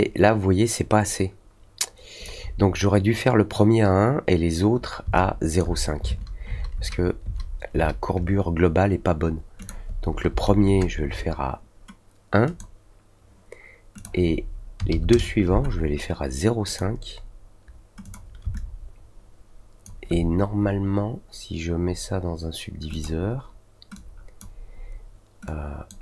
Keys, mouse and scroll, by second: 5.1-5.5 alt+drag, 9.5 click, 12.4 click, 13.9 click, 16.6 click, 18.0 click, 18.5-19.8 alt+drag, 22.9 click, 23.9-24.3 drag, 25.4-25.8 drag.